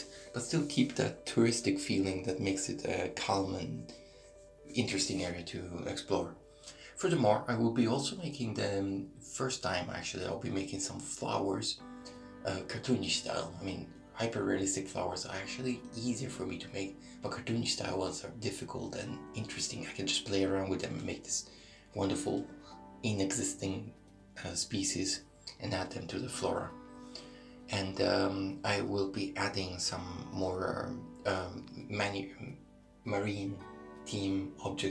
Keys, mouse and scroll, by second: 0.7 middle click, 3.7 right click, 4.0 shift+middle click, 4.6 right click, 5.0 middle click, 5.9 click, 8.0 click, 11.2 middle click, 12.5 ctrl+r, 14.1 middle click, 15.1 right click, 16.2 middle click, 17.1 click, 18.9 ctrl+r, 19.7 middle click, 20.5 right click, 20.9 middle click, 22.0 click, 23.6 middle click, 24.8 shift+middle click, 26.7 right click, 28.5 click, 29.9 right click, 31.7 e.